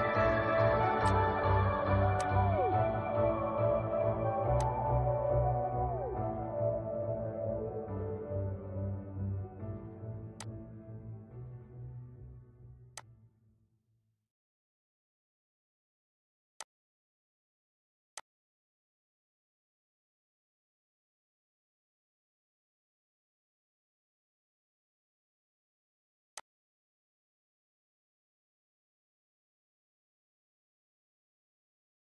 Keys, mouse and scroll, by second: 0.0 click, 3.5 click, 4.3 scroll down 1, 5.6-8.2 shift+middle drag, 8.2 scroll up 1, 9.3 click, 11.9 click, 12.5-12.9 scroll down 1, 13.6-15.5 shift+middle drag, 15.5 click, 17.9-18.3 scroll up 1, 18.9-23.5 shift+middle drag, 23.5-24.3 scroll down 1, 25.3 click, 27.4 scroll up 1, 28.3-30.2 shift+middle drag, 30.2 scroll up 1, 30.9 middle click, 31.7-32.0 scroll up 1.